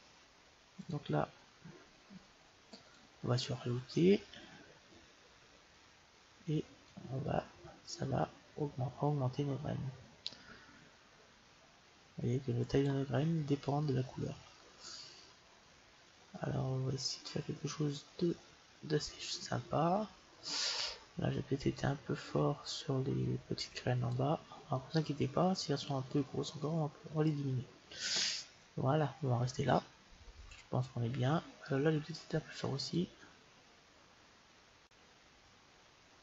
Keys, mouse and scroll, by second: 0.7-2.6 drag, 8.5 click, 13.6-15.5 middle drag, 22.0-23.7 drag, 24.7-26.6 middle drag, 29.5-34.8 middle drag, 33.2-34.9 drag.